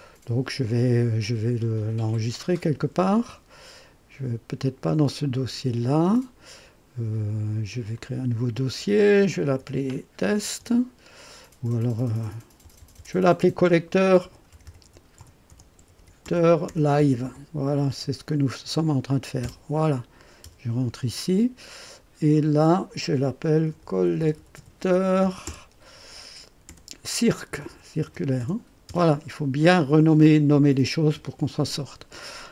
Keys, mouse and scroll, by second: 3.1 ctrl+s, 5.8 click, 7.9 click, 9.2-10.9 typing, 12.4-18.4 typing, 19.4 Return, 20.4 Return, 22.3 click, 23.4-28.9 typing.